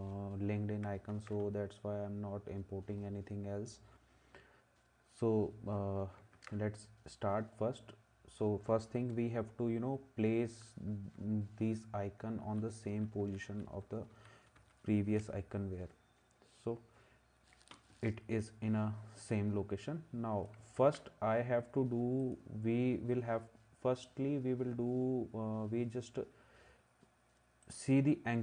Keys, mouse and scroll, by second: 1.1 ctrl+s, 6.4 ctrl+s, 12.5 Down, 12.9 Down, 13.2 Down, 13.5 Down, 13.8 Down, 14.1 Down, 14.6 Down, 20.8 ctrl+s.